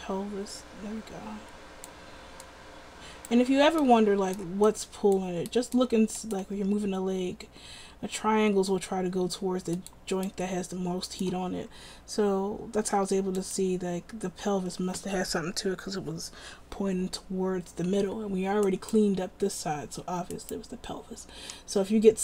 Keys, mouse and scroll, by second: 6.7 r.